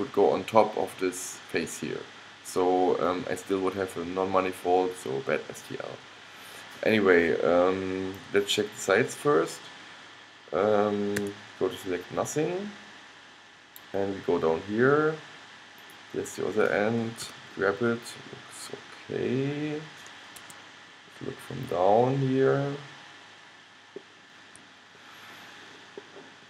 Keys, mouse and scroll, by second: 11.3 a, 12.4 middle click, 14.3-15.9 middle drag, 17.4 g, 21.2-22.3 middle drag, 22.9 middle click, 23.6 scroll up 1, 25.0-26.4 middle drag.